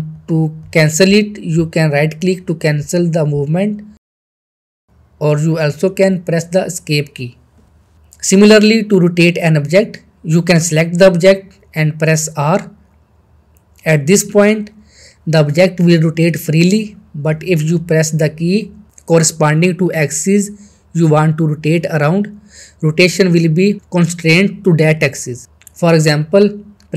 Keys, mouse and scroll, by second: 0.0 right click, 3.0 right click, 3.1 g, 4.0 z, 5.9 Escape, 8.5-8.8 middle click, 9.3-10.3 shift+middle click, 13.8 shift+r, 15.7 shift+r, 19.0 shift+x.